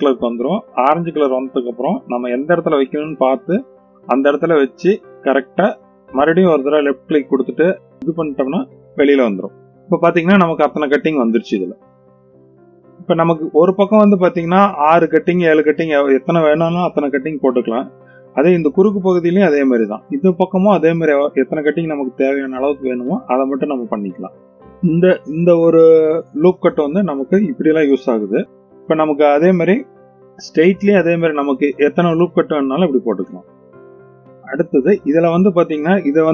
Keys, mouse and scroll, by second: 7.5 right click, 9.4 click, 9.7-12.0 middle drag, 12.8 scroll down 1, 12.9-13.7 middle drag, 18.2-18.8 middle drag, 19.3-19.8 middle drag, 24.1-25.2 middle drag, 27.4 ctrl+r, 29.7 click, 30.1 middle click, 31.2 click, 31.4 click, 31.6 middle click, 32.4-33.0 scroll up 1, 33.0 middle click, 33.0-33.3 scroll up 1.